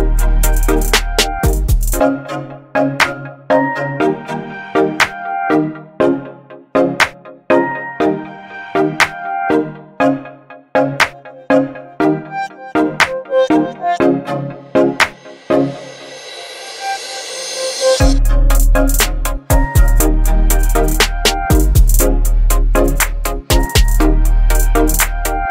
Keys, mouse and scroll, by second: 11.9 click, 12.1 click, 16.7 click, 17.6 click, 20.8 click, 20.8-25.5 drag.